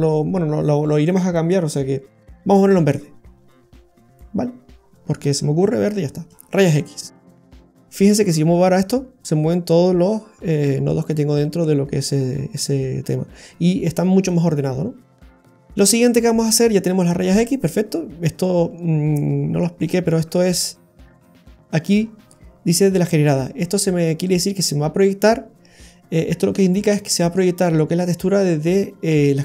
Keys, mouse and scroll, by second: 4.8-6.1 scroll down 11, 5.6 middle click, 6.1-6.9 scroll down 4, 6.9 middle click, 8.2 click, 15.1-16.4 scroll down 2, 15.4 middle click, 18.6 click, 20.9-21.3 scroll up 5, 21.3 middle click, 21.8-22.6 scroll up 7.